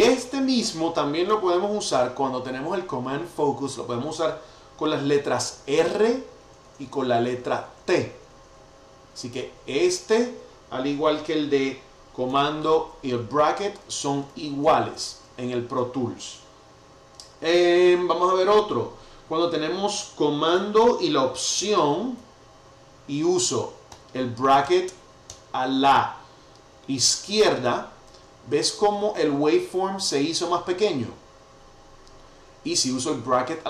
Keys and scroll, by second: 0.1 super+], 0.5 super+[, 5.4 r, 6.4 t, 9.0 r, 12.8 super+[, 13.4 super+], 14.6 super+[, 22.1 alt+super+[, 23.9 alt+super+[, 27.1 alt+super+[, 31.7 alt+super+].